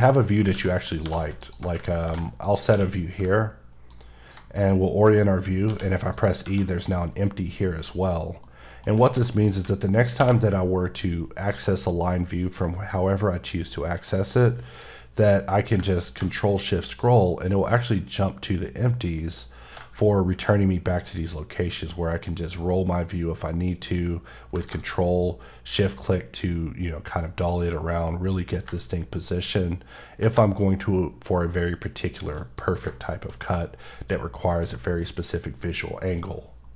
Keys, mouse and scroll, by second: 0.6 middle click, 0.9 scroll up 1, 1.0 2, 1.4 alt+click, 2.0 b, 2.4 click, 2.7 q, 3.9 ctrl+click, 4.5 click, 5.7 e, 6.1 click, 7.9 KP_1, 8.4 middle click, 8.5 scroll down 1, 9.0 alt+a, 9.3 middle click, 10.2 v, 14.5 click, 16.7-17.6 shift+scroll up 2, 17.6 shift+scroll up 1, 18.4 shift+scroll up 1, 19.5 shift+scroll up 1, 20.7-21.1 ctrl+scroll down 3, 22.1 ctrl+scroll down 3, 22.3 ctrl+scroll up 3, 23.0-23.5 ctrl+scroll down 3, 23.6-24.6 ctrl+scroll up 1, 24.7-25.1 scroll up 2, 25.1 shift+scroll down 2, 25.6-26.1 shift+scroll up 4, 26.7 shift+scroll up 1, 26.7-27.3 shift+scroll down 3, 27.6-28.1 shift+scroll up 2, 28.6 scroll up 1, 28.8-30.1 ctrl+scroll down 6, 30.7 shift+scroll down 1, 31.4 shift+scroll down 3, 32.3 shift+scroll down 1, 32.6 click, 33.1 shift+middle click, 33.3-34.2 shift+scroll up 2.